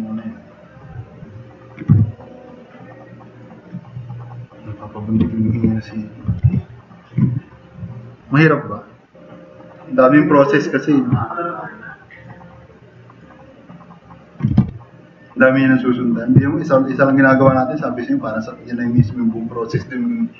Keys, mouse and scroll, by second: 2.0 t, 2.3-3.4 drag, 6.0-7.0 typing, 10.8 h, 11.3 drag, 11.9 drag, 12.3-12.7 drag, 12.9-13.3 drag, 14.5 e, 14.6 e, 16.5 drag.